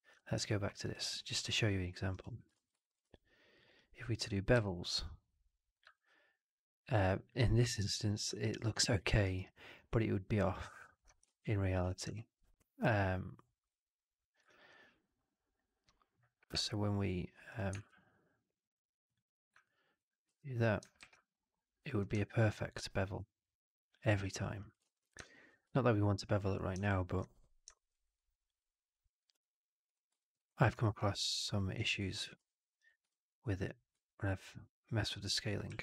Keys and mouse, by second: 0.4 alt+middle drag, 0.6 alt+right drag, 0.8 alt+drag, 2.0 click, 2.4 shift+x, 2.7 alt+click, 2.9 2, 3.5 click, 4.4 alt+b, 5.8-7.2 alt+drag, 8.2 alt+middle click, 8.4 alt+right click, 8.8 alt+click, 9.1 alt+right click, 9.3-10.3 alt+drag, 10.5 alt+right click, 10.7 alt+click, 11.2 ctrl+z, 11.7 4, 12.0-13.5 alt+drag, 14.4 click, 16.5 shift+Tab, 17.7 shift+Tab, 19.6-19.9 alt+drag, 20.2 2, 20.9 alt+b, 22.2-24.0 alt+drag, 24.2 alt+right click, 24.7 ctrl+z, 25.1 alt+right click, 25.2 alt+click, 26.7 alt+click, 27.6 alt+middle click, 27.8 alt+right click, 28.0 alt+click, 29.2 click, 29.8 click, 30.1 alt+middle click, 30.3 alt+right click, 30.7 e, 32.3 ctrl+d, 32.9 e, 33.6-35.4 ctrl+drag, 35.6 w.